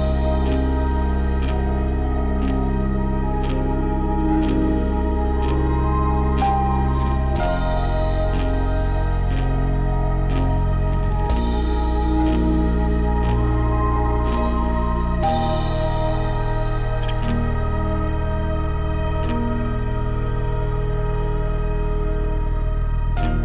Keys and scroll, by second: 4.8 Return, 15.3 5, 16.8 Return, 17.1 5, 17.2 Return, 17.4 2, 17.6 Return, 18.5 1, 18.6 Return, 19.5 F9.